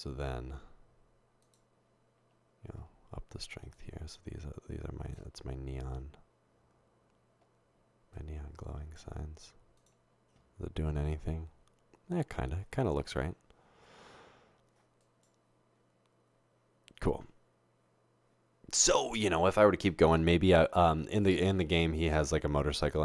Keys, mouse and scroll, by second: 3.8-5.1 drag, 8.2 click.